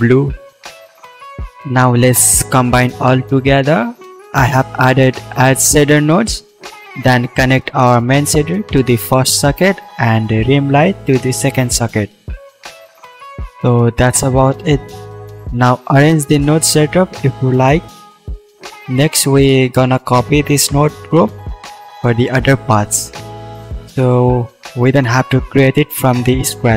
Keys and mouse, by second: 0.1 d, 2.5-7.8 drag, 8.3-14.4 drag, 14.4-16.6 middle drag, 16.6 click, 17.2-18.5 shift+middle drag, 18.5-26.7 drag.